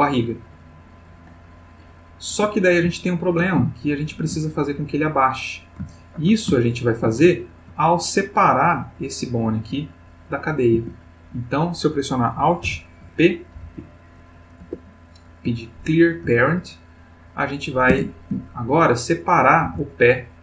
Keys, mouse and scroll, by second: 2.3 Escape, 3.0-4.5 ctrl+middle drag, 5.9-6.5 ctrl+middle drag, 6.6-7.3 ctrl+shift+middle drag, 7.6 ctrl+middle click, 8.9 click, 10.8 Tab, 12.6 alt+p, 13.6 Down, 14.6 Return, 15.8 ctrl+middle click, 17.0 click, 17.9 Tab, 18.9 click, 19.6 g.